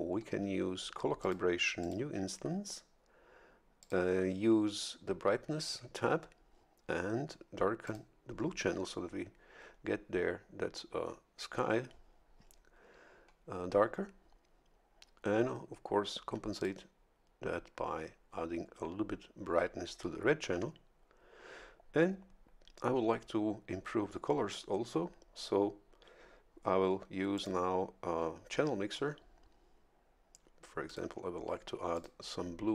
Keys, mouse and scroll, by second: 1.2 click, 1.8 click, 3.8 click, 7.8 click, 16.5 click, 27.3 click, 30.9 click, 31.9 click.